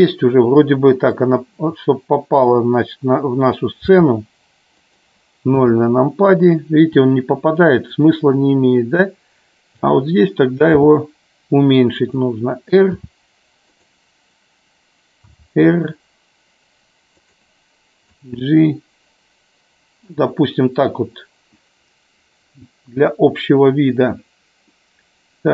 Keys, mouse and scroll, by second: 1.3-2.7 drag, 5.0 click, 5.7 KP_0, 7.9-10.0 drag, 13.1 r, 13.7 click, 18.2-20.2 drag, 25.0-25.5 middle drag.